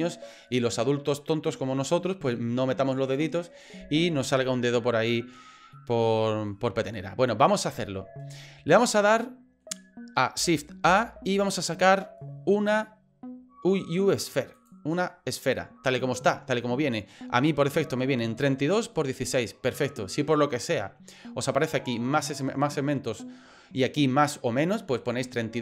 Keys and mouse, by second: 5.7 middle click, 9.0 middle click, 10.8 shift+a.